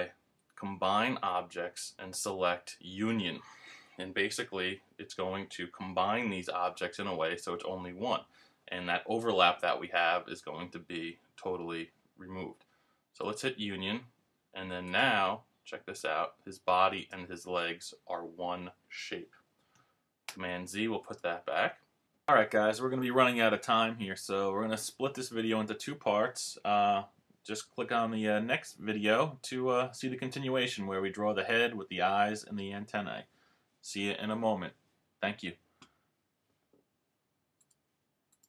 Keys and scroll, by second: 20.3 super+z.